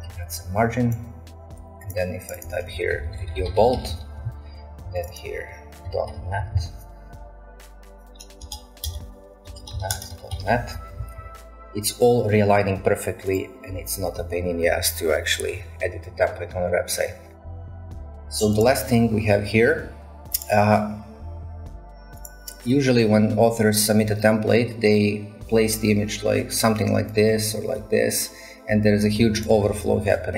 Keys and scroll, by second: 2.7-4.3 typing, 5.6-6.8 typing, 8.4 Return, 8.4 Return, 8.9-11.0 typing, 18.0 Delete.